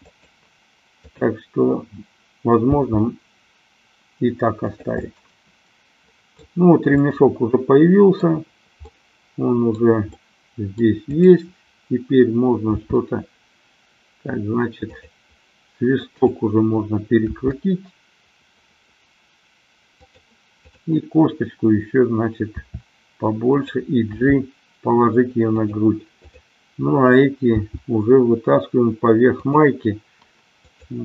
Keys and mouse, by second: 0.1 click, 1.1-2.1 drag, 2.8 g, 4.9 click, 5.1-6.5 middle drag, 7.1-8.4 middle drag, 8.9-9.9 middle drag, 10.1 middle click, 11.1-12.6 drag, 12.9 r, 15.1 click, 17.6 r, 20.1 click, 20.6-22.0 drag, 22.6 r, 23.6 click, 24.4 g, 26.3 click, 27.6 g, 29.5 click, 30.6-31.0 drag.